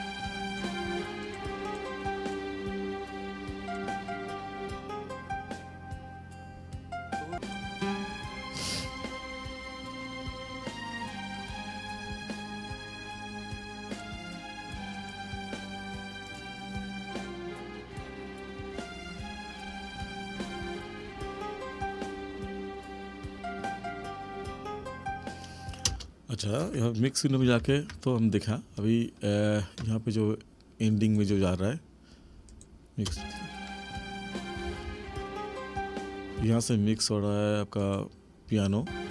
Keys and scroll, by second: 25.9 space, 27.7 ctrl+=, 33.1 space, 36.4 space, 38.8 space.